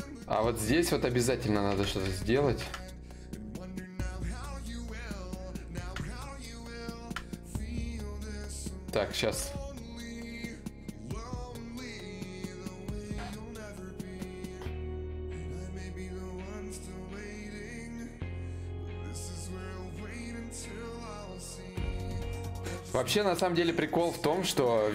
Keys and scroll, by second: 3.2 d, 3.6 d, 9.1 alt+Tab.